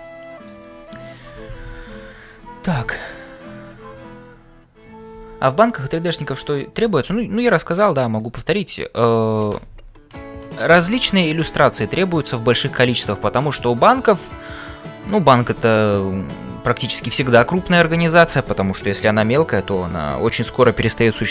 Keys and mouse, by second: 7.7 shift+middle click, 8.2 middle click, 9.3 click, 12.4-15.3 middle drag.